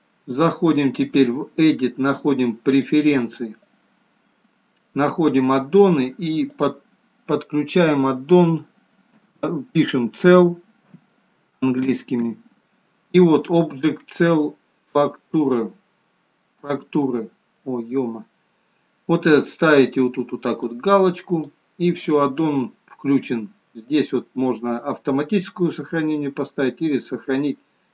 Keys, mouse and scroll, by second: 1.4 click.